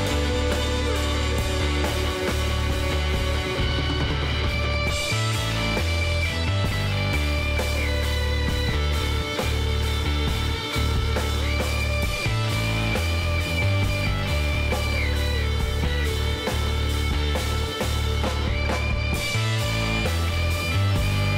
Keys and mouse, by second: 0.4 Tab, 0.7 middle click, 2.0 a, 2.5 middle click, 3.1-5.3 drag, 4.9 a, 5.9 Tab, 7.5 l, 8.4 KP_3, 9.3 middle click, 9.6 z, 10.9 shift+d, 12.6 r, 15.6 g, 18.4 z, 19.0-20.4 middle drag, 20.4 click.